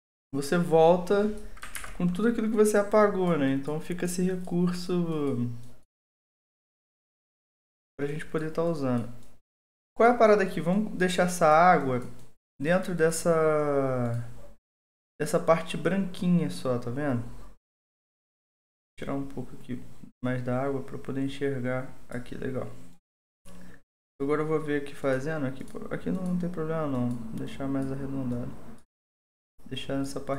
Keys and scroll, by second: 1.7 ctrl+z.